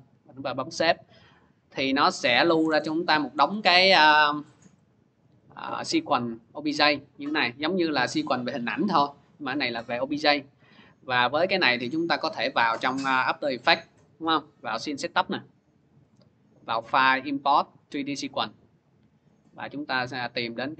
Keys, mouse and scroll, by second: 0.8 click, 2.4 alt+Tab, 4.4 click, 4.8 click, 5.2 click, 5.3 click, 6.2 click, 7.0-8.4 scroll, 9.7 click, 11.1 alt+Tab, 12.1 alt+Tab, 12.4 alt+Tab, 13.9 click, 16.4 click, 17.8 click, 19.2 click, 19.4 click, 20.0 click, 20.2 click.